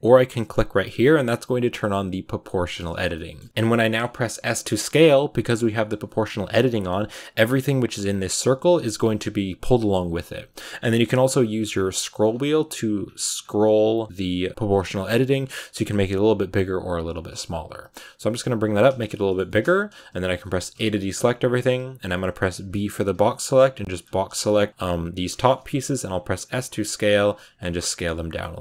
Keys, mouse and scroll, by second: 0.6 o, 1.1 click, 1.6 click, 3.0 middle click, 3.7 middle click, 4.2 s, 18.8-20.6 shift+middle drag, 20.6 a, 23.8 b, 24.2-25.8 shift+middle drag, 25.8 s, 27.2-28.6 middle drag.